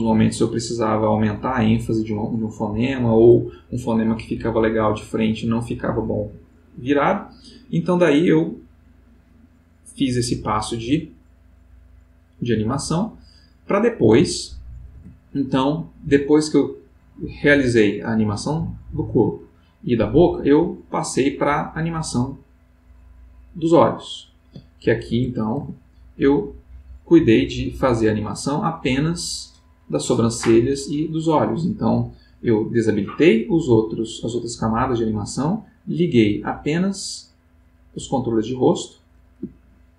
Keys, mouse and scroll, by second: 10.0-13.1 drag, 14.9 Tab, 16.7 click, 19.4 click, 22.8 click, 24.8 click, 25.6 Tab, 32.9 click, 34.0 click, 37.0 click, 38.7 click, 39.6-39.9 ctrl+middle drag.